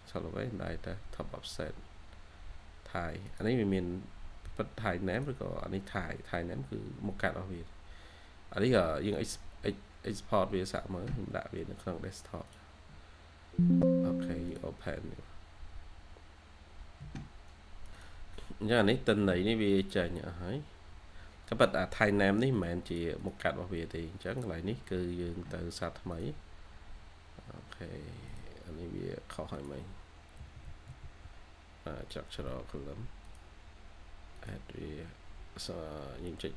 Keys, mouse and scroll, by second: 18.3-19.0 scroll up 1, 21.0 scroll down 1, 21.6-22.8 scroll up 1, 22.8 double click, 30.3-32.9 typing, 31.4-31.8 scroll down 1, 32.0-32.4 scroll up 1.